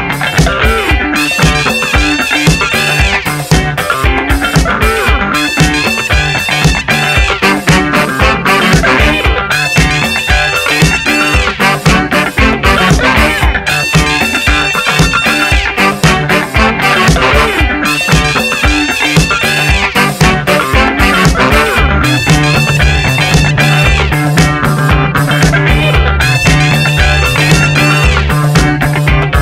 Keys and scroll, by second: 7.2 Return, 13.1 Return, 20.2 t, 21.7 Return, 23.4-27.7 typing.